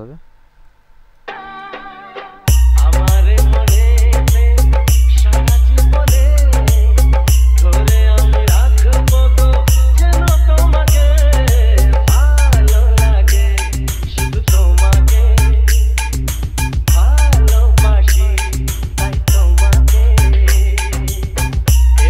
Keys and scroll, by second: 1.5 space.